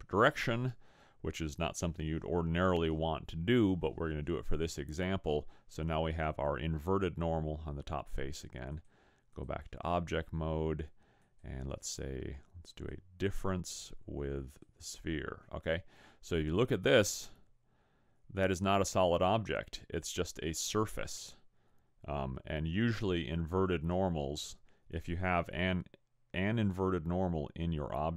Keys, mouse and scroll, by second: 8.7 click, 11.3 click, 13.7 click, 16.9 middle click.